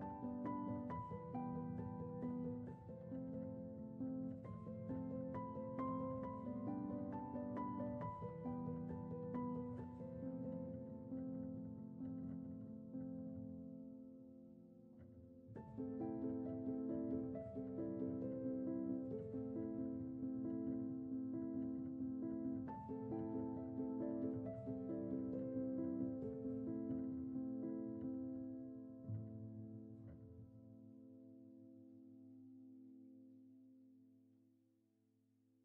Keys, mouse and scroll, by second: 3.8-9.8 drag, 9.8 ctrl+z, 10.3-10.9 middle drag, 10.9 scroll up 1, 11.2 middle click, 12.0-13.5 right drag, 13.5 click, 14.6-16.0 drag, 16.4-17.0 middle drag, 17.0 scroll up 1, 17.3 scroll down 3, 17.8 middle click, 17.9 scroll up 4, 18.0-19.0 shift+middle drag, 19.0 shift+a, 19.2-19.8 scroll down 2, 19.8 click, 20.5 click, 21.2 Tab, 21.3 scroll up 2, 21.7 1, 22.0 alt+middle click, 22.1 alt+scroll up 1, 23.0 s, 25.1 s, 26.7 alt+middle click, 29.0 s, 32.4 click, 32.7-35.1 shift+middle drag, 35.1 s.